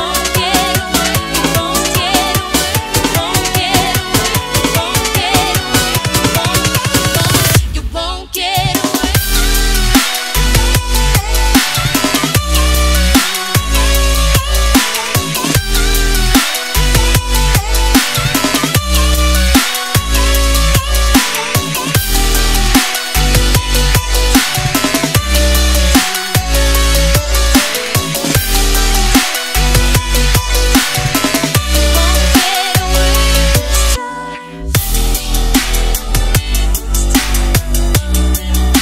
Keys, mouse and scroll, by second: 1.9-2.3 scroll up 1, 2.9-4.7 scroll up 1, 4.7 click, 11.2 Return, 13.3 ctrl+a, 15.1 click, 16.5 ctrl+d, 17.6 click, 18.2 Delete, 19.3 click, 29.1 click, 29.2 right click, 29.8 click, 30.5 right click, 30.8 click, 34.8 click, 35.4 scroll down 1, 36.4 click, 38.5-38.8 typing.